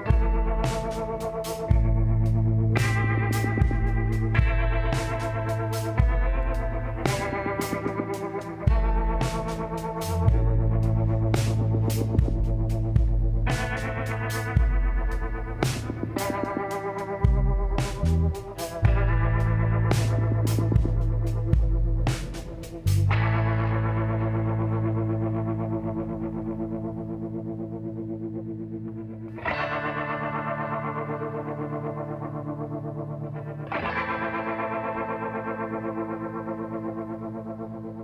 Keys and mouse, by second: 1.7-6.3 drag, 2.0 z, 3.0 b, 6.8 b, 7.5 click, 9.0-10.4 middle drag, 10.0 e, 11.2-13.1 drag, 14.1-15.9 drag, 14.5 b, 16.1-18.0 drag, 18.9-20.1 middle drag, 20.1-21.9 drag, 20.3 b, 21.6 g, 23.6 click, 24.1 z, 25.2 a, 26.4 a, 28.2 ctrl+n, 29.2 middle click, 30.4 middle click, 31.2-34.8 drag, 33.6 f, 36.7 f.